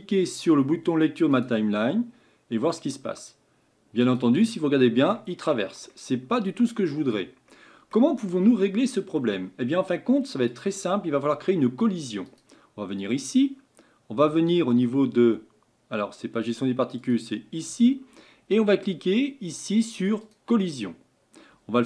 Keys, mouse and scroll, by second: 1.4 click, 4.5-5.4 middle drag, 5.4 scroll up 4, 5.9-7.0 middle drag, 7.0 scroll down 4, 7.5-8.2 middle drag, 8.2-8.9 scroll up 5, 8.9 scroll down 2, 10.6-12.4 drag, 20.4-21.8 drag.